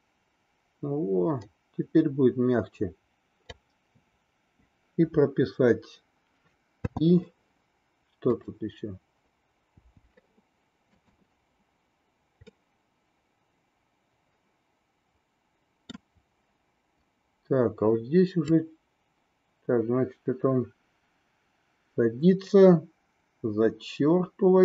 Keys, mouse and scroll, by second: 6.8 i, 8.3 click, 11.0 click, 12.6-15.9 middle drag, 18.6-24.6 drag.